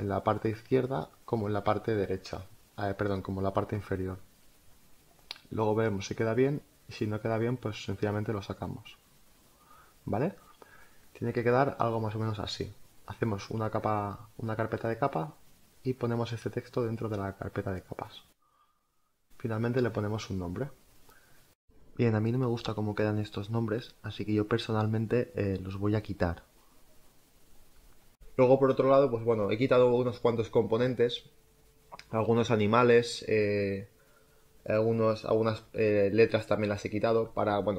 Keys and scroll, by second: 1.0 space, 8.7 Down, 11.3 space, 22.6 n.